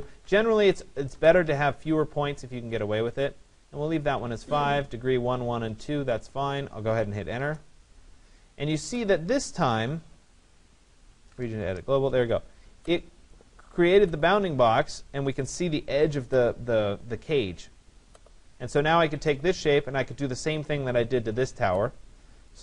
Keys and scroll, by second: 1.1 BackSpace, 1.9 Return, 7.2 Return, 11.2 Return.